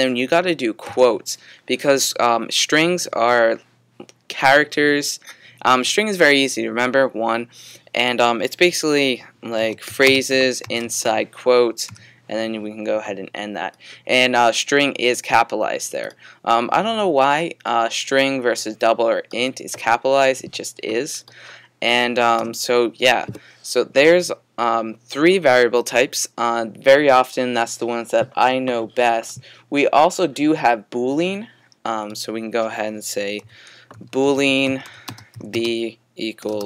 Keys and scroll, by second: 0.9 typing, 2.1 typing, 9.6-12.0 typing, 13.9 typing, 33.4-36.6 typing.